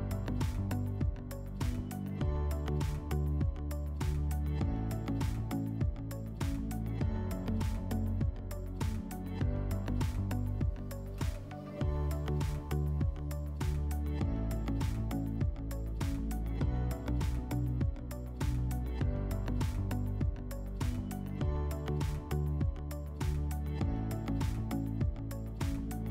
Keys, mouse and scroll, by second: 0.6 click, 1.7 click, 2.8 click, 4.3 click, 23.1 click, 24.0-26.1 drag.